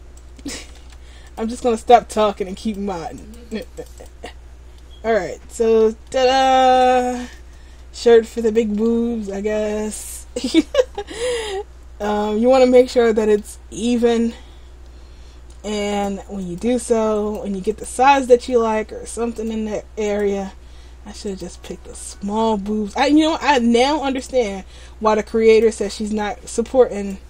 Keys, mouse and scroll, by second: 0.3 click, 1.0 ctrl+z, 1.4 click, 3.3 click, 3.7 click, 3.9 click, 4.1 click, 4.6-4.9 scroll down 2, 4.9 middle click, 6.2 middle click, 10.4-11.2 scroll down 1, 11.3 middle click, 13.7 scroll up 2, 14.1 middle click, 16.0 click, 17.4 right click, 17.9 right click, 18.4 middle click, 19.5 click, 21.4 click, 22.0 middle click, 24.4 click, 26.2 click.